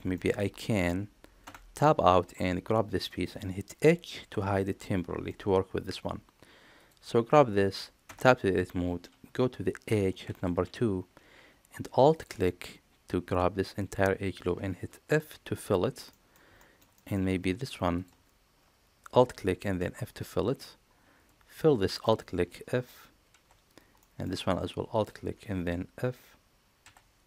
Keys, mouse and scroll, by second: 1.3 Tab, 4.1 h, 4.9 middle click, 6.7 click, 8.1 Tab, 10.0 2, 15.0 f, 16.0 middle click, 16.5 shift+middle click, 16.9 middle click, 19.7 f, 20.2 middle click, 23.9 middle click, 23.9 f, 24.8 alt+click, 26.8 f.